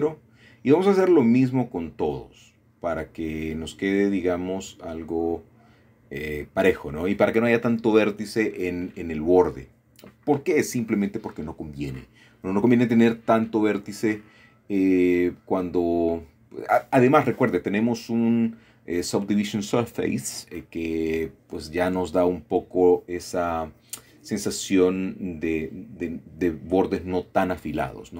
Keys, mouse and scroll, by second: 1.0 typing, 1.3 click, 2.6 typing, 3.2 click, 4.1-4.7 scroll down 1, 4.7 middle click, 5.6-7.3 typing, 6.0 shift+middle click, 7.5 click, 9.0 m, 9.5-10.6 drag, 10.7-11.4 typing, 11.7 click, 12.9 typing, 13.8 click, 15.3-15.7 typing, 16.2 click, 17.5 typing, 18.0 click, 19.6 shift+middle click, 20.4-21.1 typing, 21.4 click, 22.8 typing, 23.5 click, 24.0-24.8 typing, 25.3 click, 26.2 typing, 26.7 click, 27.2 shift+middle click.